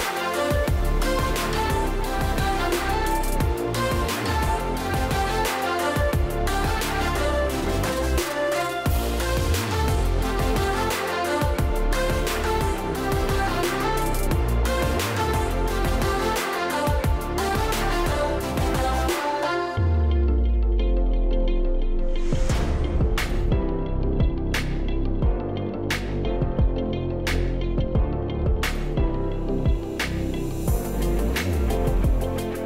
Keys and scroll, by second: 2.1 typing, 3.4 Tab, 4.5-6.3 typing.